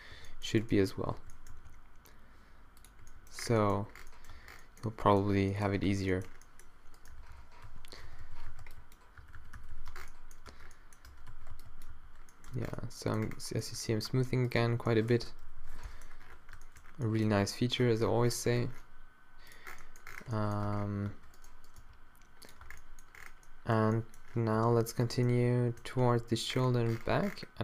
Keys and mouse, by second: 0.4 z, 1.2 z, 1.5 g, 3.1 z, 3.5 z, 4.3 Tab, 4.3 g, 5.9 Tab, 7.2-9.8 typing, 9.9 Tab, 10.5 Tab, 11.2 Tab, 11.3 a, 11.5 b, 11.9 q, 12.5 Tab, 14.1 Tab, 15.6 alt+o, 16.9 middle click, 17.3 g, 20.7 Tab, 21.1 Tab, 21.8 g, 22.7 Tab, 24.6 Tab, 26.3 g.